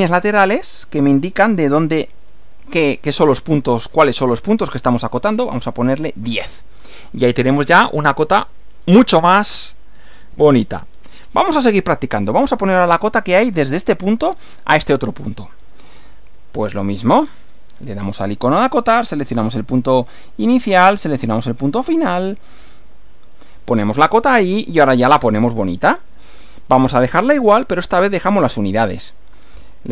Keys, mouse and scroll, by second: 1.1 click, 1.6 click, 2.2 click, 5.4 1, 5.8 0, 7.4 scroll down 2, 7.8 scroll up 2, 9.2-11.8 middle drag, 15.4 scroll up 2, 16.9 click, 19.5 click, 21.2 click, 22.8 click, 29.5 click.